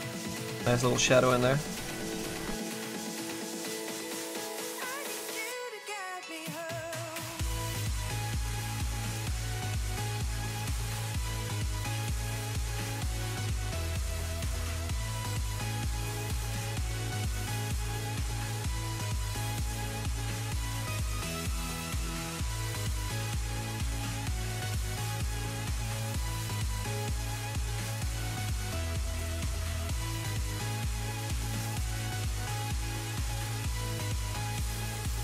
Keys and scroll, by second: 2.4 z.